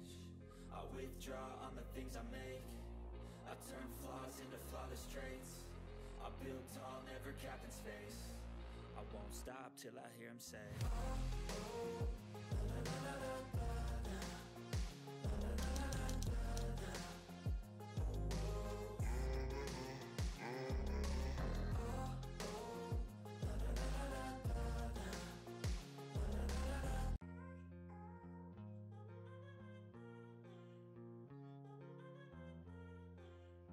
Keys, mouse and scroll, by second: 8.0-9.8 drag, 12.2 typing, 15.3 typing, 15.7 ctrl+z, 16.8 click, 17.6 right click, 18.9 right click, 18.9 click, 23.6 click, 23.6 right click, 24.7 click, 27.9 click, 27.9 right click, 28.8 click, 32.3-33.7 drag.